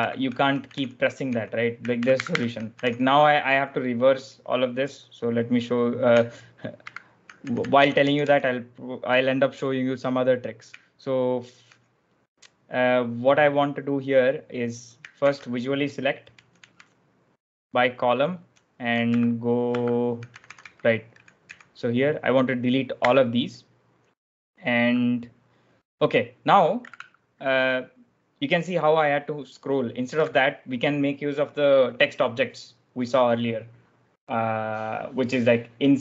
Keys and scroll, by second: 0.1-1.1 typing, 1.9 ctrl+e, 2.1 ctrl+e, 2.4-3.2 typing, 6.7 ctrl+e, 7.1-8.6 typing, 15.1 ctrl+v, 16.2-18.4 typing, 19.0 ctrl+d, 19.6 ctrl+d, 19.6-22.9 typing, 26.7 typing.